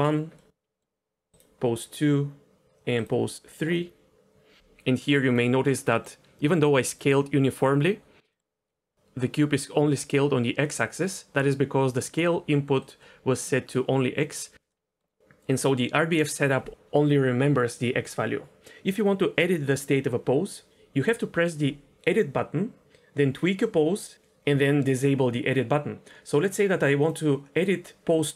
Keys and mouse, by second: 0.4-0.8 middle drag, 1.3 click, 3.8-4.6 middle drag, 5.7 middle drag, 8.3 middle click, 8.7 middle click, 10.6-11.1 middle drag, 12.8 click, 13.0 click, 14.7 middle click, 27.0 click.